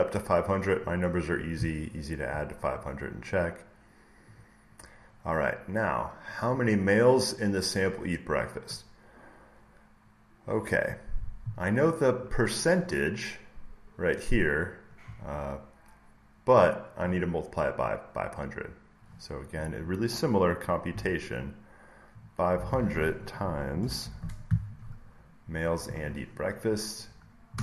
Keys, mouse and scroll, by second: 1.8 scroll, 2.0-3.9 scroll down 1, 3.9 scroll down 1, 4.3-6.3 drag, 9.9 middle click, 9.9 scroll, 10.4-11.9 scroll up 1, 11.9 middle click, 11.9 scroll, 12.1-14.1 drag, 18.3 click, 19.6 click, 22.1-23.9 drag, 23.9 *, 25.9 click, 27.5 Return.